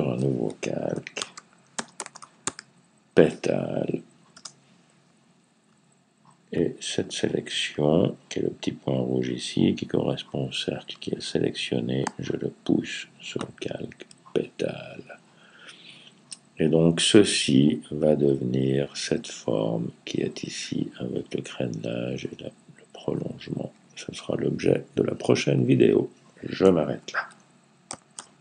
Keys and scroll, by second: 0.8-2.8 typing.